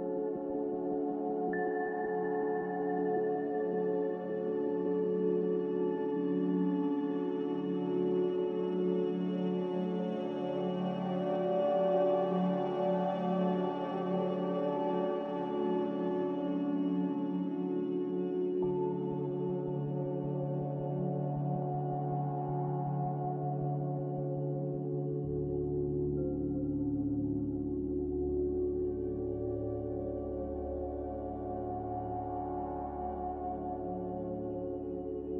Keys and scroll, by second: 0.9 z, 1.0 3, 13.9 Return, 32.4 a.